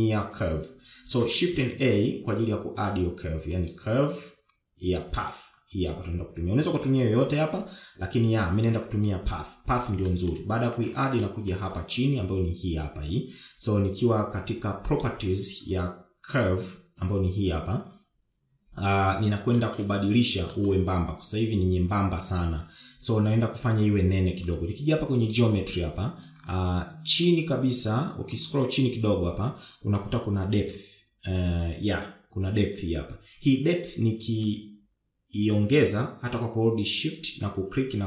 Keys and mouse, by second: 0.8 shift+middle click, 3.0 shift+a, 11.4 shift+middle drag, 12.5-12.8 middle drag, 20.8 shift+middle drag, 21.8 shift+middle click, 26.5 click, 35.5-38.0 shift+drag.